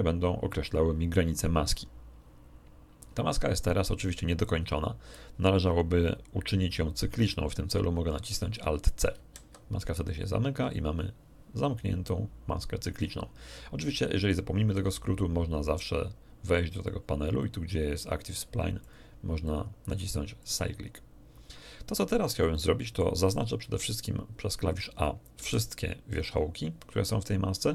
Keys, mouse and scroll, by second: 9.1 alt+c, 14.7 n, 16.8 click, 18.8 click, 19.4 click, 19.8 click, 20.4 click, 22.4 middle click, 23.6 a, 25.3 a.